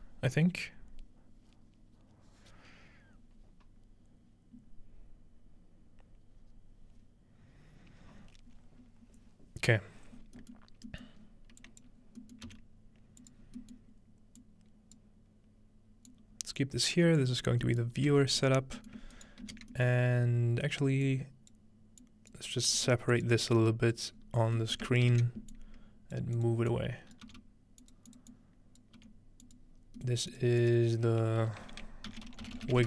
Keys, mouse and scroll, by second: 10.5-10.9 middle drag, 11.1 middle click, 11.2-11.6 scroll up 1, 11.6 drag, 12.0 scroll up 2, 12.2 middle click, 12.5 g, 13.4 scroll down 2, 13.6-14.0 scroll up 1, 14.0-15.0 scroll down 1, 14.4 click, 16.1 click, 17.2 drag, 18.1 typing, 18.7-21.1 scroll down 1, 19.2-20.0 typing, 21.1-21.7 drag, 22.0 click, 22.8 g, 23.1 click, 24.1-25.3 drag, 24.1-26.0 scroll up 1, 24.7-26.4 ctrl+middle drag, 25.1 ctrl+j, 26.2 ctrl+click, 26.5 click, 27.3 click, 27.3 g, 28.0 click, 28.2 click, 29.0 click, 29.0 g, 29.6-32.7 drag, 30.0-31.9 middle drag, 31.4 F2, 32.2-32.8 typing.